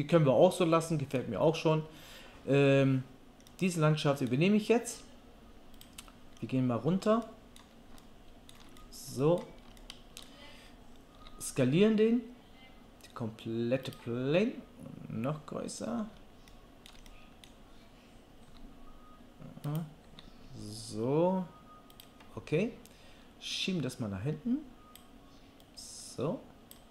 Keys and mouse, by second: 0.9-8.4 drag, 0.9-8.4 middle drag, 0.9-8.4 right drag, 11.2 s, 12.6-13.9 middle drag, 13.9-16.9 right drag, 16.9-19.8 drag, 18.5 s, 19.8-23.6 middle drag, 20.0 s, 23.6-26.9 drag.